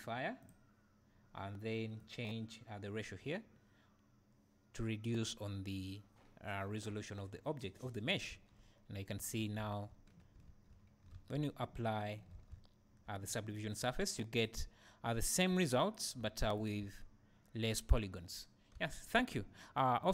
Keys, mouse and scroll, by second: 8.3 Tab, 9.2 Tab, 9.7 `, 12.5 `, 13.9 scroll up 1, 14.6 `, 16.2 `, 16.6-18.0 drag.